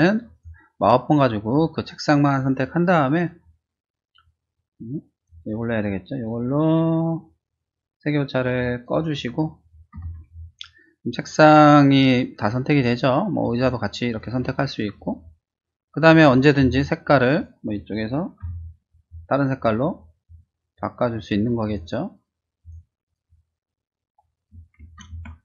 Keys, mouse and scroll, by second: 0.3 click, 5.1 click, 8.5 click, 9.9 ctrl+d, 10.2 click, 13.5 shift+click, 14.1-15.1 shift+drag, 17.3 click, 18.4 ctrl+u, 20.1 click, 20.6 click, 21.0 click, 21.6 click, 22.6 click, 23.0 click, 24.3 click, 25.0 ctrl+d.